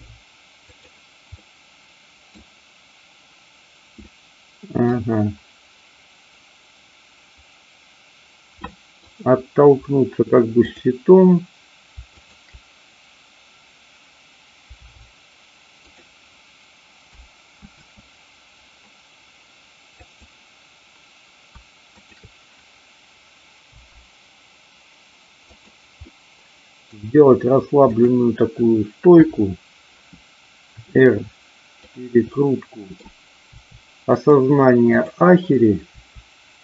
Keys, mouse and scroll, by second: 0.7 click, 1.4 middle click, 4.1-5.0 middle drag, 8.6-9.0 middle drag, 12.2 shift+click, 14.8 g, 16.0 click, 20.1-21.0 drag, 22.0 shift+click, 23.7 g, 25.4 click, 26.1 middle click, 27.8-28.8 drag, 29.1 KP_7, 30.8 r, 32.3-33.2 middle drag, 34.1 click, 34.8-35.8 drag.